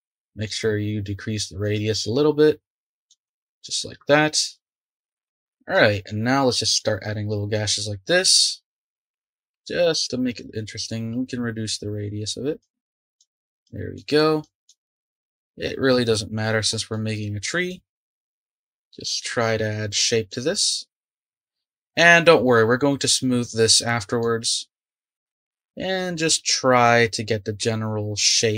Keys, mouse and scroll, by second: 0.4-3.3 drag, 3.3 ctrl+z, 5.3 shift+middle click, 6.0-9.0 drag, 9.0 ctrl+z, 9.1 ctrl+z, 9.5 ctrl+z, 11.1-16.9 drag, 16.9 middle click, 17.7-19.3 drag, 19.3-20.3 middle drag, 20.3-23.0 drag, 23.7 middle click, 24.5 click, 25.1 shift+middle click, 25.3-28.3 drag.